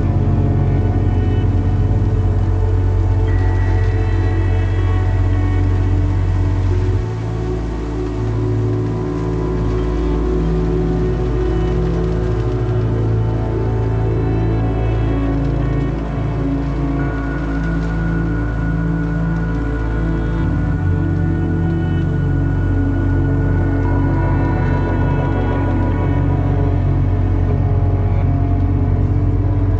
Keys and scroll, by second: 11.6 KP_1, 11.8 KP_5, 14.1 `, 14.7 `, 15.4 `, 16.0 `.